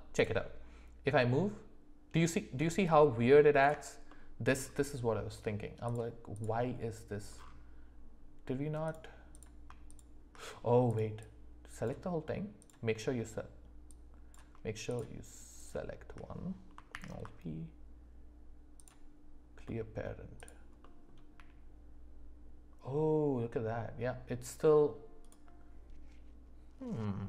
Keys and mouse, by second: 0.1 click, 1.0 g, 4.1-4.5 middle drag, 10.9 click, 11.7 click, 13.9 click, 14.9 shift+click, 15.6 shift+click, 16.9 alt+p, 19.6 middle drag, 20.8 middle click, 21.4 g.